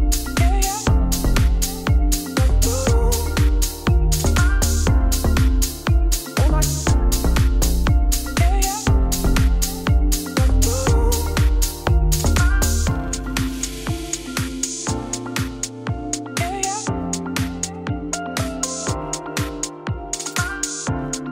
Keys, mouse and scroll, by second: 0.0 Tab, 0.1 s, 3.0 KP_1, 3.3 Tab, 3.4 g, 4.9 Tab, 5.1 e, 6.3 middle click, 6.8 scroll up 2, 6.9 middle click, 7.5 3, 7.6 click, 7.8 middle click, 7.9 g, 10.0 Tab, 10.3 middle click, 10.8 shift+a, 11.6 Tab, 12.1-13.2 middle drag, 13.2 s, 14.3 Tab, 14.5 g, 15.2 Tab, 15.4 e, 16.8 KP_1, 17.5 Tab, 17.8 g, 19.3 alt+d, 21.2 alt+d.